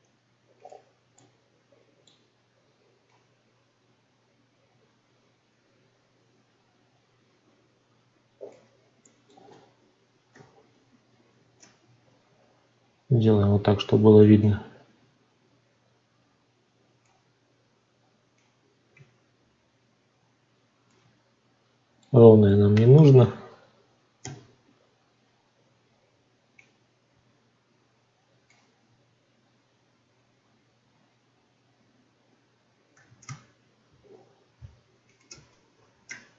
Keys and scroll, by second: 36.0 3.